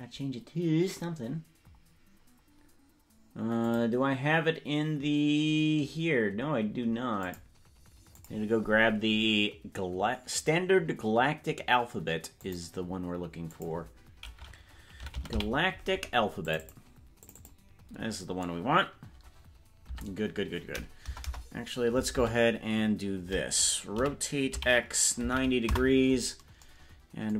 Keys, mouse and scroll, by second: 2.0 scroll down 2, 3.6-7.3 drag, 8.1 click, 20.0 Tab, 21.2 BackSpace, 21.4 BackSpace, 22.2 Tab, 24.0 r.